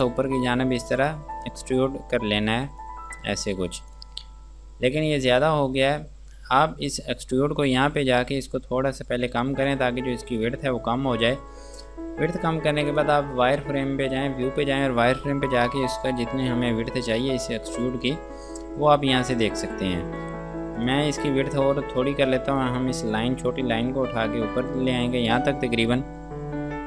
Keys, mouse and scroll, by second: 4.2 click, 4.6 scroll down 1, 7.8 scroll up 1, 8.6 click, 10.2 scroll down 1, 10.7 scroll up 1, 13.1 click, 15.7 click, 16.6-17.2 scroll down 1, 17.2-17.6 scroll up 1, 18.5 scroll down 1, 21.0 click.